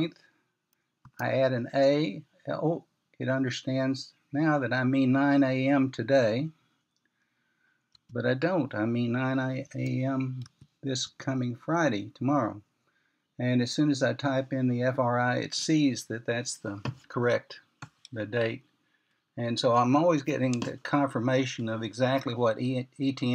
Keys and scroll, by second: 1.9 typing, 10.9-12.4 typing.